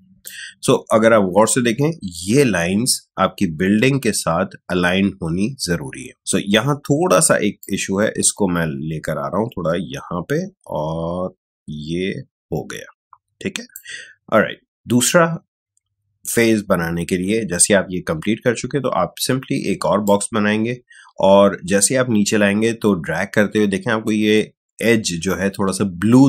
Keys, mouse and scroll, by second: 7.5-16.2 drag, 20.0-26.2 drag.